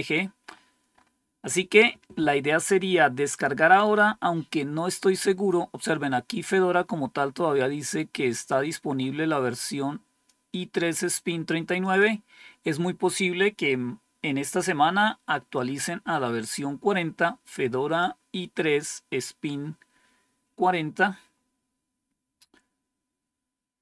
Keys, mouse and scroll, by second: 0.4-1.6 scroll up 3, 3.2 click, 8.2-10.2 drag, 11.7 click, 15.4-18.3 drag.